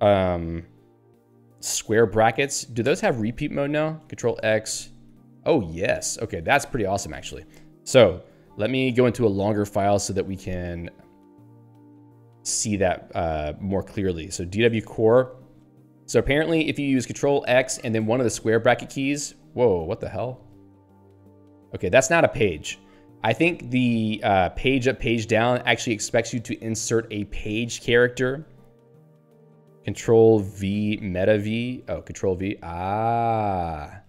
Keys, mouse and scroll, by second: 2.9 ctrl+g, 5.1 ], 5.7 [, 6.5 ctrl+g, 11.7 ctrl+g, 12.4 ctrl+f, 12.7-14.7 typing, 14.9 Return, 18.4-22.4 typing, 23.4 ctrl+g, 25.9 Down, 30.7 ctrl+v.